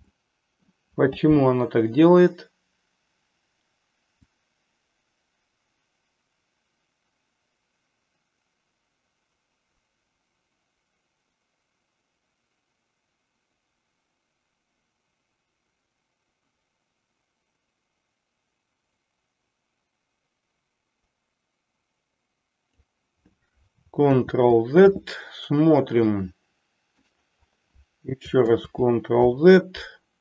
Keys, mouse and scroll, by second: 0.1-0.6 middle drag, 4.1-22.9 drag, 24.1 ctrl+z, 26.0-27.1 middle drag, 28.5 ctrl+z.